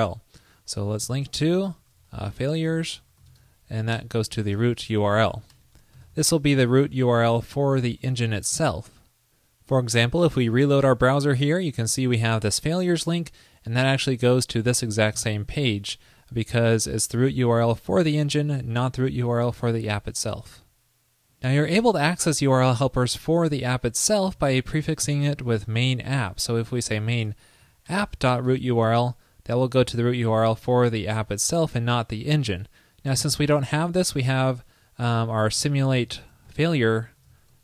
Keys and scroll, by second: 8.0 super+s, 10.7 super+r, 23.3 super+c, 24.4 super+v.